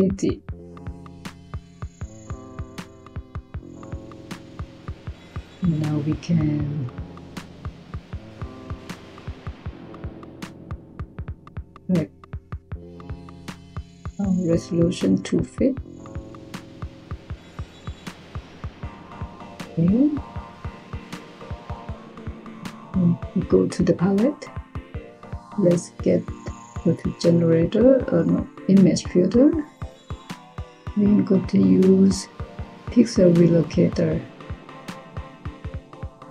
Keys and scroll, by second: 3.0 typing.